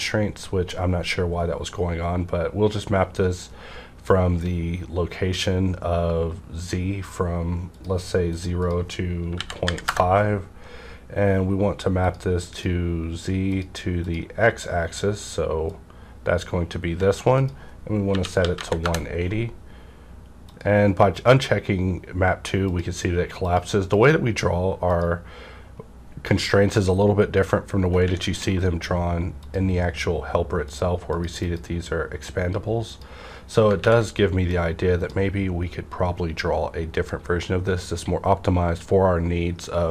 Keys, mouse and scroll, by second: 7.7 click, 8.6 click, 9.3 KP_Decimal, 9.6 KP_5, 9.8 KP_Enter, 12.0 click, 12.5-17.3 drag, 17.3 click, 18.0 KP_1, 18.3 KP_8, 18.5 KP_0, 18.8 KP_Enter, 20.4 click, 21.1 click, 28.4 alt+space, 28.4 click, 29.3 click, 30.7 click, 34.0 ctrl+`, 34.4 click, 34.5-37.3 drag.